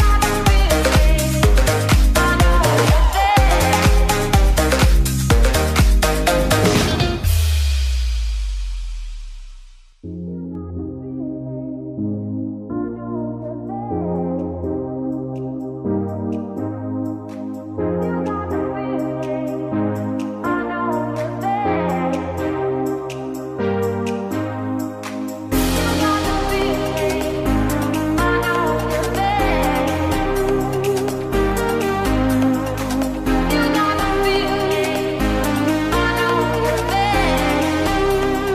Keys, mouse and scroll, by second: 3.1 click, 6.5 click, 9.1 click, 14.7 drag, 19.4 click, 30.9-33.3 drag, 37.0 ctrl+g.